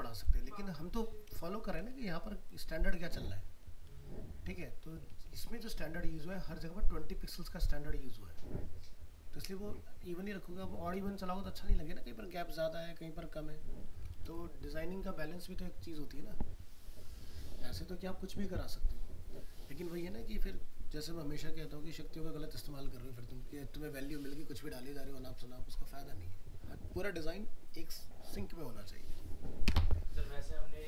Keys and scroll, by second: 4.9 ctrl+-, 14.1 ctrl+alt+0.